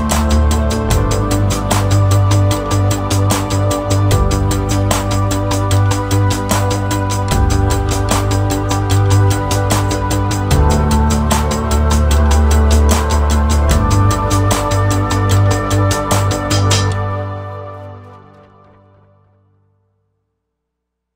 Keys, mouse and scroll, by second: 3.6 space, 4.5 click, 5.4 click, 6.1 scroll down 1, 6.2 middle click, 6.3 scroll up 2, 6.6 middle click, 7.3 click, 8.2 ctrl+shift+d, 9.1 scroll down 3, 9.3 middle click, 9.8 click, 11.2 click, 12.1 click, 12.5 scroll down 3, 12.6 middle click, 13.1 click, 13.6 click, 14.0 click, 14.3 scroll up 4, 14.5 middle click, 15.1 click, 15.7 shift+a, 17.6-18.0 scroll up 1, 18.0 click, 19.1 middle click, 19.1-19.6 scroll up 4, 19.6 click, 20.0 middle click, 20.1 scroll up 2, 20.3 click.